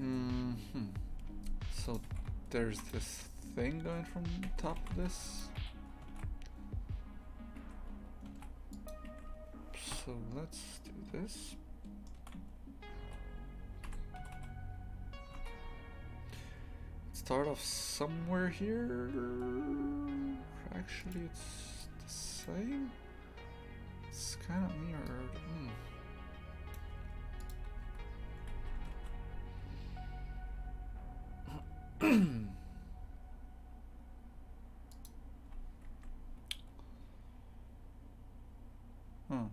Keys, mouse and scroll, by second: 1.8 right click, 2.1 shift+f, 4.4 Tab, 4.8 shift+f, 5.6 a, 6.1 ctrl+r, 8.3 ctrl+r, 9.9 KP_3, 11.4-13.0 shift+middle drag, 13.0 g, 14.2 g, 27.5 click, 28.6 a, 28.9 ctrl+r.